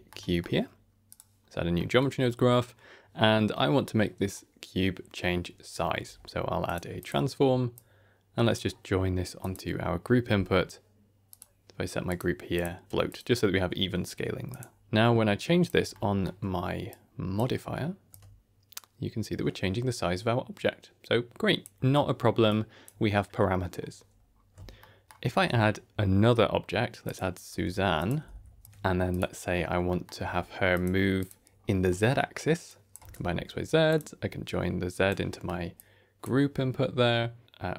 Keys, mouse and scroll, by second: 0.1 middle click, 1.0 click, 1.7 middle click, 2.3-2.7 scroll up 2, 5.9 q, 7.6 click, 9.3 click, 10.2 n, 11.2 click, 12.0 click, 12.4 click, 13.0 click, 13.4 n, 14.4 click, 14.8 shift+click, 15.8 ctrl+middle click, 16.3 scroll down 1, 16.8 click, 18.0-21.6 shift+drag, 22.4 click, 24.1-24.4 scroll down 3, 24.7 shift+middle click, 25.2 shift+a, 27.4 g, 28.1 r, 28.6 ctrl+a, 28.6 shift+middle click, 28.6-29.0 scroll up 1, 29.0 click, 29.8 middle click, 30.1 q, 31.4-31.8 scroll up 2, 31.8 middle click, 32.6-33.8 drag, 34.3 click, 35.2 middle click, 35.7 click.